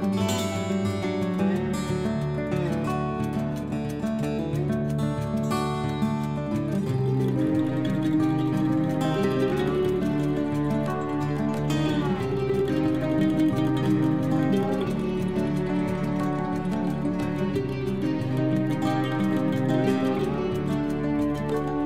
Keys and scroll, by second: 0.3 ctrl+Home, 17.1 t, 21.0 ctrl+Home.